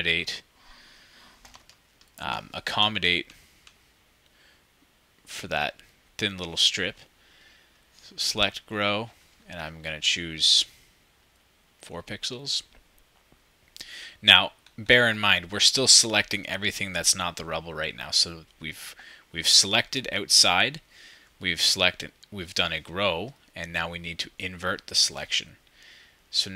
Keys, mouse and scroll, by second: 2.8 ctrl+shift+super+z, 2.8-5.7 shift+drag.